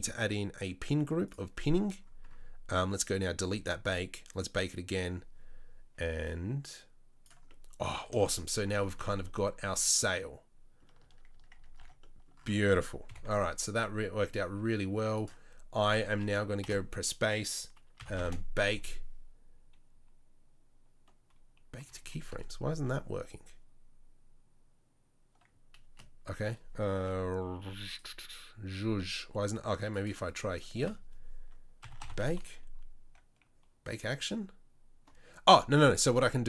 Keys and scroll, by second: 9.0 Tab, 9.6 Tab, 11.0 Tab, 11.3 Tab, 11.5 Tab, 11.8 Tab, 13.1 KP_7, 16.6 space, 22.0 Down, 25.9 space, 27.9 space, 30.8 space.